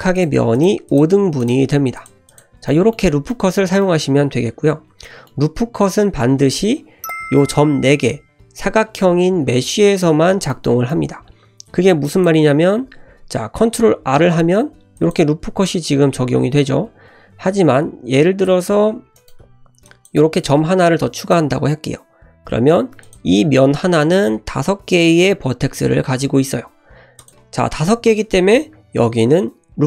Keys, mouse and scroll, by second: 0.2 click, 0.6 shift+click, 0.9 shift+click, 1.4 shift+drag, 2.0 shift+click, 2.3 click, 2.7 middle click, 3.3 middle drag, 3.8-4.5 middle drag, 4.5 1, 5.0 middle click, 5.6-6.2 scroll up 1, 10.5-11.3 middle drag, 11.3 scroll up 1, 12.1-12.4 shift+drag, 13.6 ctrl+r, 16.3 ctrl+r, 18.4 shift+click, 19.2 right click, 19.8 click, 20.2 g, 22.9 3, 23.0 click, 23.8 1, 27.2 click, 29.0 ctrl+r.